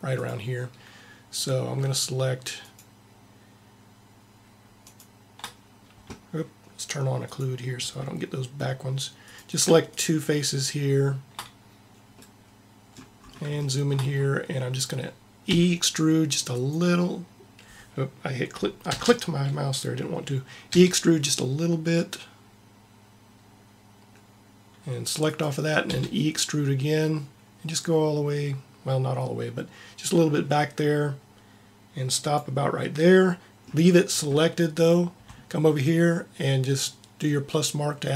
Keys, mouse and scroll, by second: 7.3-11.6 drag, 15.4 middle click, 15.5 e, 18.9 ctrl+z, 20.7 e, 26.1 e, 32.8 middle click, 38.0-38.1 drag.